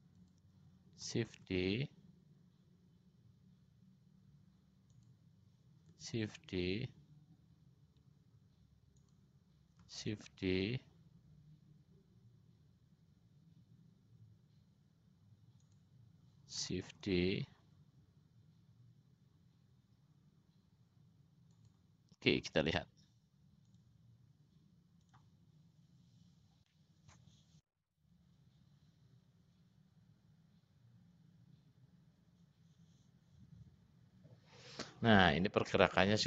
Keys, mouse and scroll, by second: 10.5 shift+d, 17.3 shift+d, 24.2 click, 25.2 click.